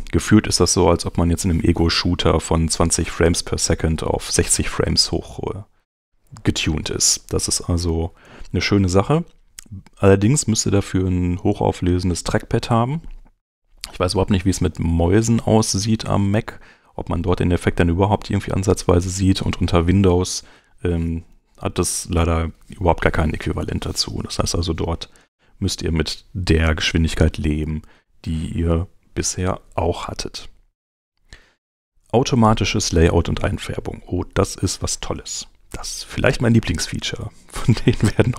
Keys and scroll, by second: 27.2 super+Tab, 34.2 super+Tab.